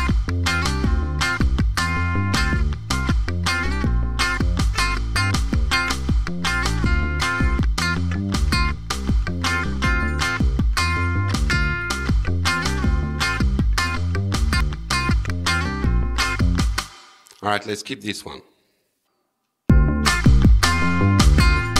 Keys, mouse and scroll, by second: 2.9 click, 8.9 click, 9.3 right click, 14.5 click, 16.8 space, 19.7 space.